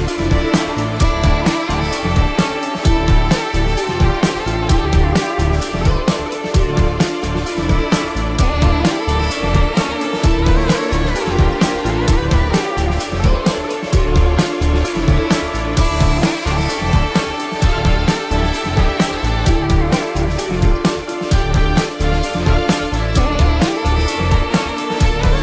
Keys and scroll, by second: 1.7 space, 1.9 ctrl+alt+z, 2.3 ctrl+alt+z, 5.5 space, 6.0 space, 6.8 ctrl+alt+z, 9.4 ctrl+alt+z, 10.0 ctrl+alt+z, 10.9 ctrl+alt+z, 11.7 ctrl+-, 12.3 space, 12.9 ctrl+-, 14.7 ctrl+alt+z, 16.3 ctrl+alt+z, 17.3 ctrl+alt+z, 18.1 ctrl+alt+z, 18.6 ctrl+-, 19.6 space, 20.2 ctrl+-, 21.8 ctrl+alt+z, 22.8 ctrl+-, 22.9 space, 23.8 ctrl+alt+z, 24.4 ctrl+alt+z.